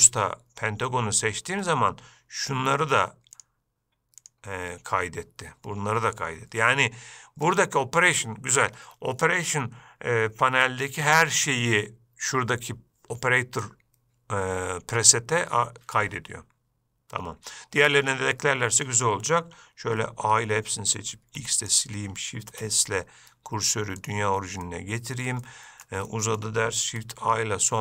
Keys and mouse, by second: 3.8-4.6 drag, 7.9-9.3 drag, 20.5 a, 21.6 x, 22.8 shift+s, 24.9-25.4 middle drag, 25.7-26.1 ctrl+middle drag, 26.4 shift+middle drag.